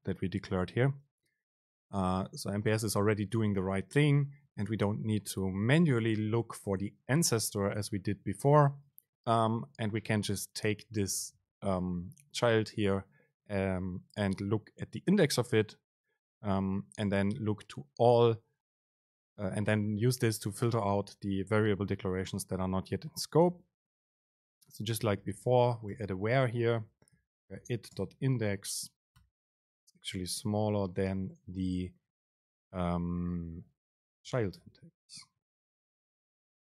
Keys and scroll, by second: 24.0 super+space, 28.1 super+space, 31.7 BackSpace, 35.3 super+space.